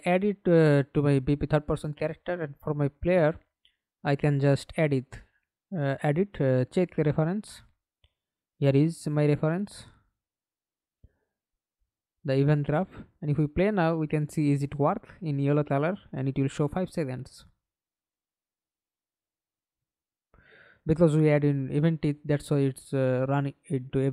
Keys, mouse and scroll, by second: 0.7 right click, 4.5-6.4 typing, 6.4 Return, 7.0 right click, 10.4 right click, 12.2 double click, 12.6 double click, 13.0 middle click, 13.7 F11, 14.2 alt+p, 20.1 Escape, 20.8 middle click, 21.5 F11.